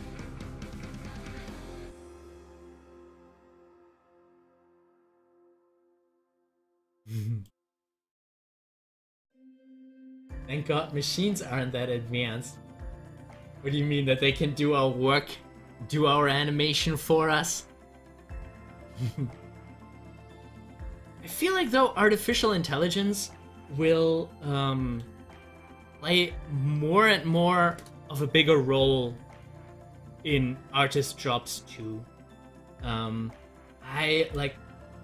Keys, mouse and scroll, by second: 0.8 scroll up 1, 1.9 middle click, 3.1 scroll down 1, 3.6-7.5 middle drag, 7.5-15.2 drag, 15.2 middle click, 16.4 scroll down 1, 17.0-19.1 middle drag, 19.1 scroll down 1, 19.7-21.3 middle drag, 21.3 click, 24.4-27.4 middle drag, 29.4-35.0 drag.